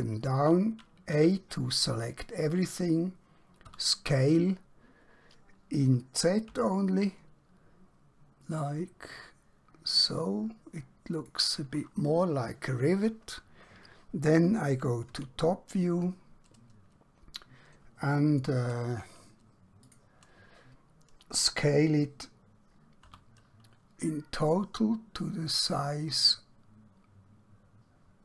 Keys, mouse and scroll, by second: 1.1 a, 3.6 s, 8.7 z, 11.2 click, 15.0 KP_7, 19.8 click, 23.0 s.